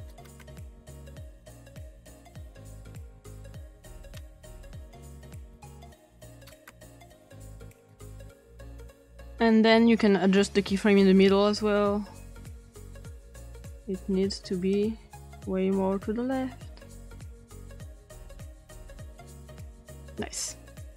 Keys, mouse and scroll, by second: 0.1 click, 0.3 1, 0.4 Return, 0.9 click, 1.2 click, 1.8-2.9 drag, 2.9 click, 3.2 click, 4.5-5.4 drag, 5.5 click, 5.9 ctrl+z, 6.0 click, 6.4 click, 6.5 typing, 6.7 Return, 7.0-7.7 drag, 7.8 click, 9.8 click, 14.7-16.6 drag, 16.8 drag, 17.4-17.7 scroll down 1, 17.8-18.2 drag, 18.3 click, 18.9 click, 19.4 click.